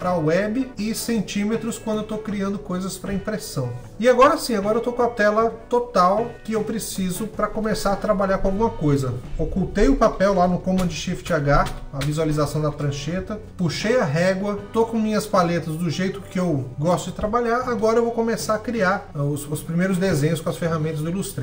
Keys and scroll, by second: 10.4 shift+h, 11.3 shift+h, 11.6 shift+h.